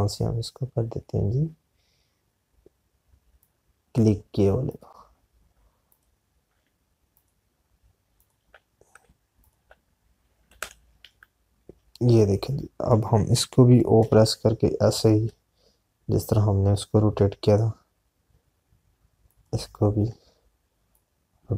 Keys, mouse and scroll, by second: 4.4 click, 10.7 click, 13.6 ctrl+z, 21.2 alt+click.